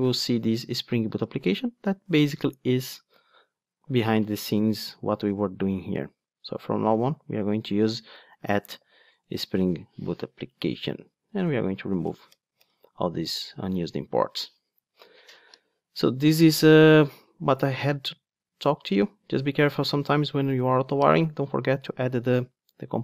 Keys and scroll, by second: 2.0 super+z, 2.6 super+z, 9.2 Return, 12.2 alt+Return.